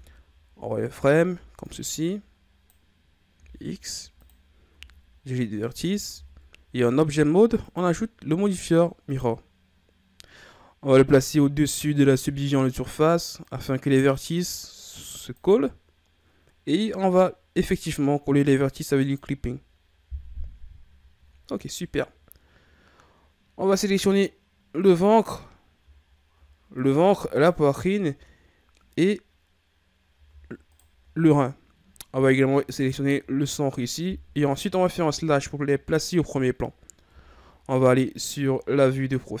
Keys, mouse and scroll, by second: 1.3 b, 3.3 x, 4.7 z, 6.1 Tab, 7.6-10.7 drag, 11.2-14.1 drag, 14.8 click, 19.0 click, 21.3 a, 22.6-23.5 scroll down 4, 24.1-24.8 scroll up 2, 24.8 right click, 26.0-26.7 shift+scroll up 4, 26.7 right click, 27.3 shift+right click, 30.7 shift+right click, 32.8 shift+right click, 35.1 KP_Divide, 37.1 KP_3, 38.5-39.4 ctrl+scroll down 3.